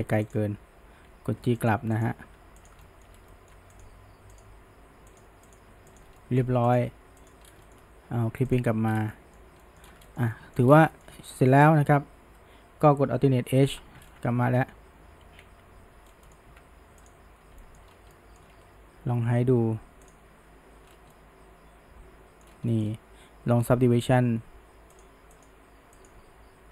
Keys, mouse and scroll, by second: 0.3 click, 1.1 g, 2.0 click, 2.2 g, 2.9-3.2 shift+middle drag, 3.3-3.8 middle drag, 3.8 click, 4.4 click, 4.6 g, 5.5 click, 5.7 g, 6.2-6.7 shift+middle drag, 6.7 click, 6.9 g, 7.7 shift+middle click, 8.6 click, 9.1-9.9 middle drag, 10.1-10.7 shift+middle drag, 11.0-11.6 shift+middle drag, 11.6-13.7 scroll down 1, 13.7 alt+h, 14.0-15.3 scroll down 1, 15.3 alt+a, 16.1 scroll down 1, 16.3 shift+middle click, 16.5 Tab, 17.1 click, 17.6-17.9 shift+middle drag, 17.9 scroll up 1, 18.1-20.1 middle drag, 20.1 click, 20.9 scroll up 1, 21.2-22.5 middle drag, 22.5 scroll up 1, 22.7 middle click, 22.9-25.0 scroll down 2, 25.0 click, 25.4 click.